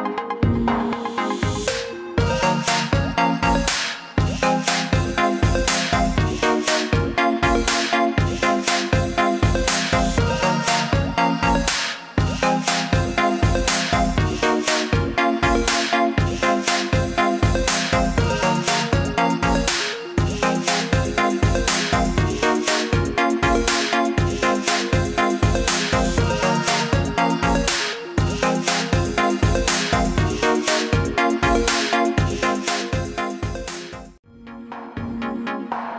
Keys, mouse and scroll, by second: 3.4 BackSpace, 3.9 click, 4.1 BackSpace, 4.6 click, 4.9 BackSpace, 5.9-9.8 drag, 12.1 ctrl+z, 13.2 click, 34.1 click.